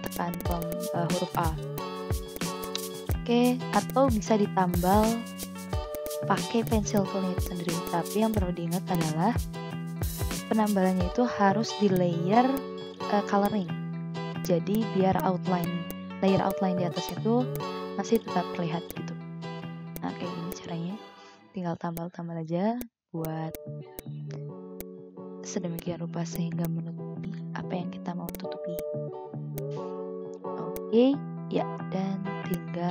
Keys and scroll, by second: 1.2 v, 3.7 ctrl+z, 5.7 v, 6.4 i, 7.2 v, 8.5 ctrl+z, 8.8 v, 9.2 ctrl+z, 11.7 ctrl+z, 14.6 v, 19.0 ctrl+z, 22.7 v, 23.4 ctrl+z, 24.9 ctrl+z, 26.2 v, 26.5 ctrl+z, 30.5 ctrl+z.